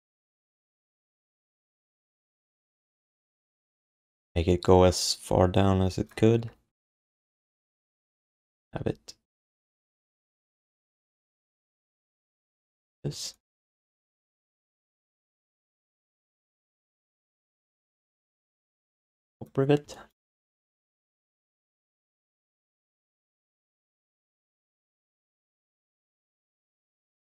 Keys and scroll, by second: 0.9 space, 2.1 4, 6.3 space, 6.7 space, 8.6 r, 11.0 q, 12.6 q, 13.1 alt+shift+d, 15.2 q, 15.9 alt+shift+d, 16.4 3, 20.8 1, 22.3 q, 23.1 alt+shift+d, 23.3 ctrl+s, 26.1 alt+shift+d.